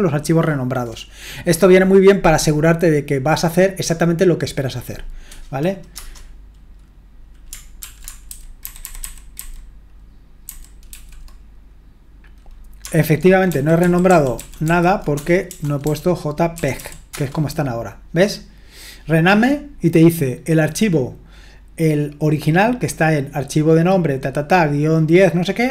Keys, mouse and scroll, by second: 5.9 Return, 7.8 ctrl+p, 8.3 alt+b, 8.6 alt+b, 8.8 alt+b, 9.0 alt+b, 9.3 alt+b, 10.4 alt+b, 10.9 alt+f, 13.5 alt+f, 13.8 alt+f, 14.1 alt+f, 14.3 alt+f, 14.7 alt+f, 15.1-17.2 typing, 22.6-23.9 drag.